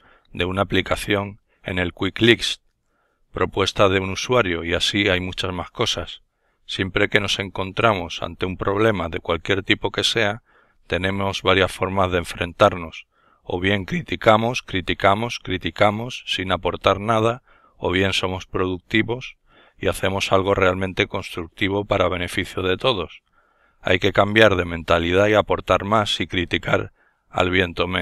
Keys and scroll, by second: 8.1 n, 13.2 alt+F4.